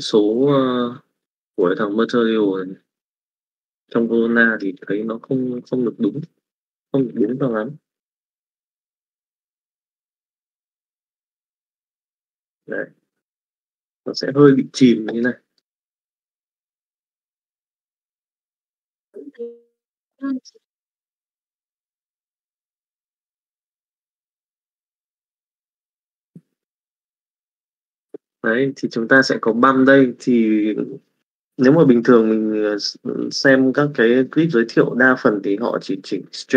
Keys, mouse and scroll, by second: 6.2-7.3 drag, 7.8-9.9 drag, 10.8 middle click, 11.9 middle click, 13.2 middle click, 15.0 middle click, 16.1-17.9 middle drag, 18.5-22.9 middle drag, 29.3 middle click.